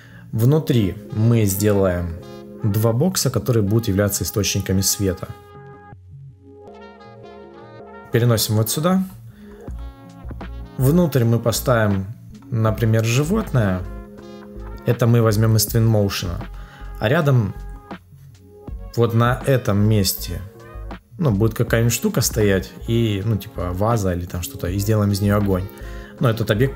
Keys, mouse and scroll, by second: 5.7 Return, 5.9 Return, 6.0 Return, 6.2 Return, 6.3 Return, 6.4 shift+click, 6.8 ctrl+click, 7.0 Return, 7.2 ctrl+click.